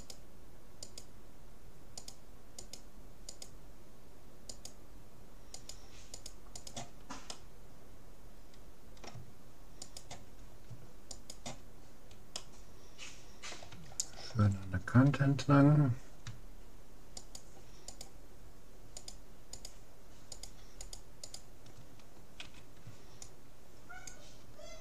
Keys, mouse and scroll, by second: 7.4 middle click, 8.4 middle click, 9.8-12.8 right drag, 11.8 middle click, 12.3 click, 12.8-14.2 middle drag, 15.4-16.4 middle drag, 17.2-23.0 right drag, 22.4 c.